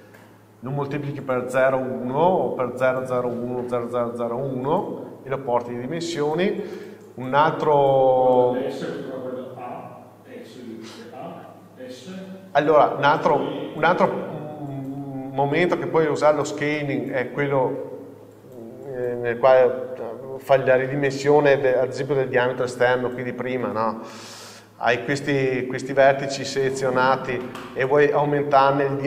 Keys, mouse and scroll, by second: 8.6-10.5 middle drag, 12.4 KP_7, 13.2 scroll up 1, 14.3 shift+middle click, 15.1-16.9 middle drag, 16.2 scroll up 1, 17.5 scroll up 1, 23.5 middle click, 23.5-24.4 scroll up 1, 25.0-26.4 scroll up 2, 26.4-26.9 scroll down 2, 26.9 middle click, 27.6 scroll up 2, 27.8 scroll down 2, 28.0 middle click.